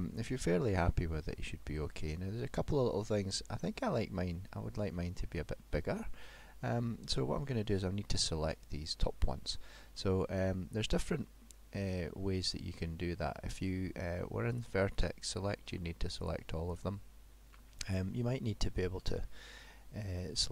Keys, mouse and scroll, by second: 5.4 middle click, 12.5 middle click, 14.6 click, 15.3 click, 16.3 click, 16.8 click, 19.0 middle click.